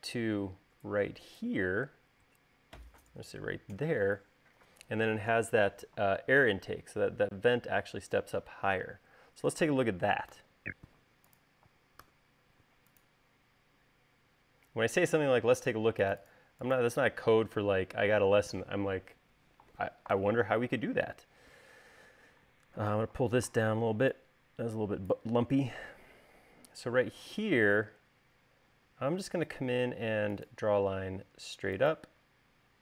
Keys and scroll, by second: 10.7 u, 12.4 u, 23.3 v, 27.4 l.